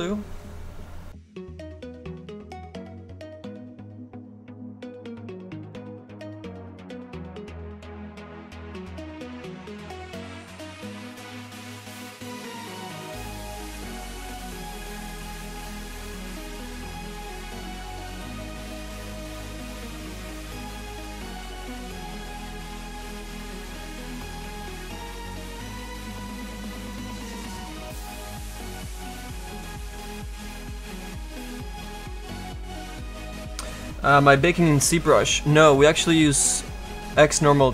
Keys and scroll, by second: 0.8 s, 27.9 s, 28.2 s, 29.0 s, 30.3 s.